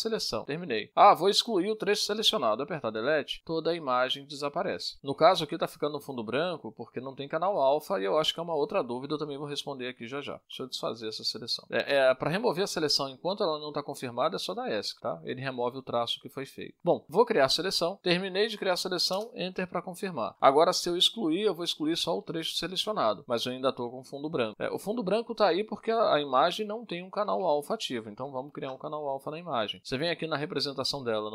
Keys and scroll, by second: 4.1 Delete, 11.4 ctrl+z, 13.1 Escape, 21.3 Return, 24.1 Delete, 29.3 ctrl+z, 30.3 ctrl+shift+a.